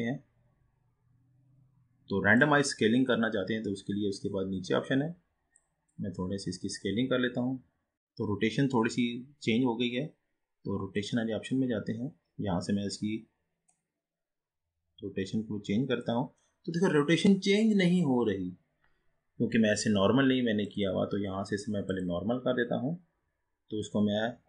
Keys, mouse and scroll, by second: 3.1-7.9 drag, 7.9-8.9 scroll up 4, 9.4-11.1 scroll up 2, 11.1-17.1 drag, 20.7-24.0 drag.